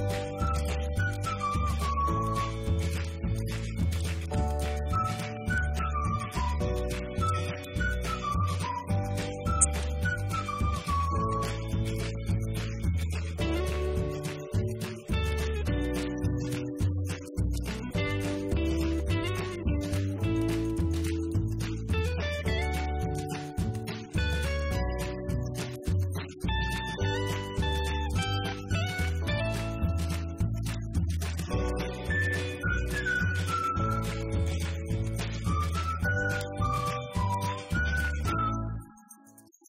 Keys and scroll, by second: 0.0-0.2 typing, 1.4 Left, 1.7 Right, 2.3 1, 3.4 6, 3.8 ., 4.4 8, 4.8 Return, 5.8 Right, 5.9 Up, 7.0 Right, 8.0 Left, 8.9-9.7 typing, 12.6 Up, 16.3 Left, 16.5 Down, 16.6 Left, 17.6 b, 18.2 Right, 19.3-20.2 typing, 23.1-24.2 typing, 24.3 Return, 25.2 Right, 25.3 Up, 25.8 Right, 25.9 Down, 27.2 Down, 29.8 Left, 30.3 Up, 31.3 shift+Down.